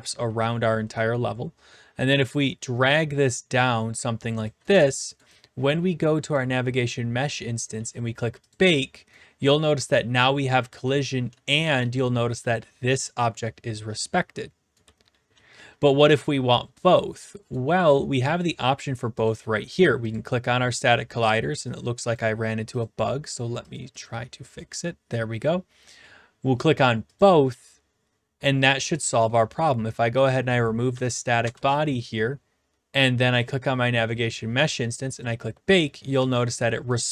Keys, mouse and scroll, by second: 0.0-0.4 typing, 1.1 right click, 4.4 click, 4.7 typing, 5.2 right click, 6.3 click, 7.7 w, 7.8 right click, 8.5 click, 9.2-12.9 typing, 12.4 right click, 14.8-17.2 typing, 17.5 right click, 19.3 click, 20.1 click, 20.8 click, 21.8-25.6 drag, 27.2-28.2 drag, 30.9 click, 30.9 Delete, 31.4 Return, 33.4 click, 35.2 click, 36.2-36.8 e, 36.9 right click.